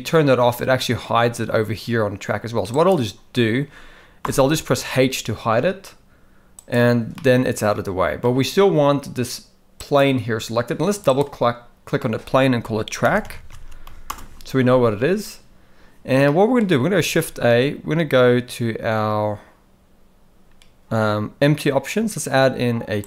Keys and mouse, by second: 2.7 click, 4.2 h, 6.5 click, 7.1-8.2 middle drag, 9.8 click, 11.0-14.0 drag, 16.3-16.6 middle drag, 17.0 shift+a.